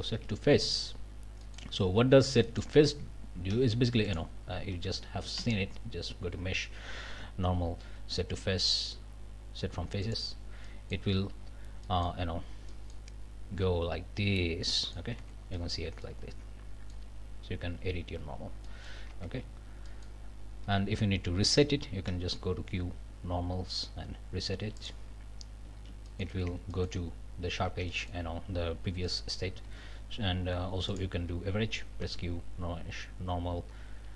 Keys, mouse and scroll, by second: 0.0 ctrl+alt+Up, 1.0 scroll down 2, 1.5 middle click, 2.4 middle click, 3.5 3, 4.1 click, 5.4 q, 10.0 click, 10.7 click, 11.5 scroll down 1, 11.8 click, 12.7 click, 14.8 click, 15.2 Tab, 15.5 click, 16.0-17.1 drag, 18.7 click, 19.1 Tab, 19.4-19.9 scroll up 2, 19.9 click, 22.1 q, 24.8 click, 25.3 scroll down 1, 25.8 alt+a, 26.1 alt+click, 26.4 alt+Tab, 26.7 alt+click, 27.7 Tab, 27.9 click, 29.1 click, 29.6 a, 30.9 click, 32.0 q.